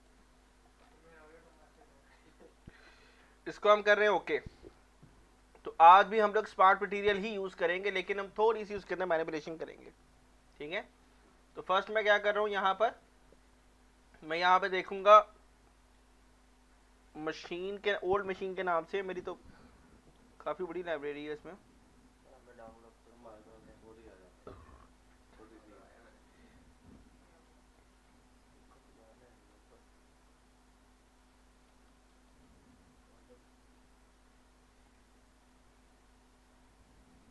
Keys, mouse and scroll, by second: 0.8 scroll down 1, 1.2 scroll up 1, 1.5 click, 6.2-9.5 drag, 11.6-14.6 right drag, 14.6 click, 18.7-20.5 scroll down 1, 24.5-29.3 scroll down 1, 29.5-31.3 scroll down 1, 31.7-34.2 scroll down 1, 37.2 scroll up 1.